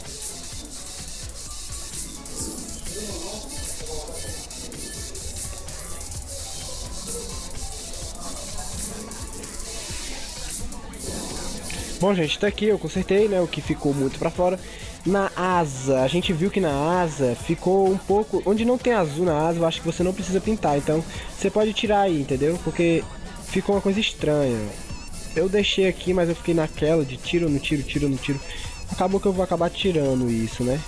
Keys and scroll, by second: 11.9 ctrl+0.